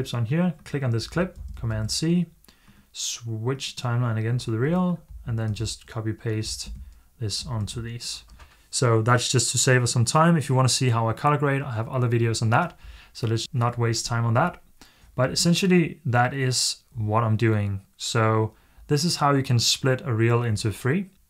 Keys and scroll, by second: 1.2 super+c, 1.6 super+c, 5.3 super+v.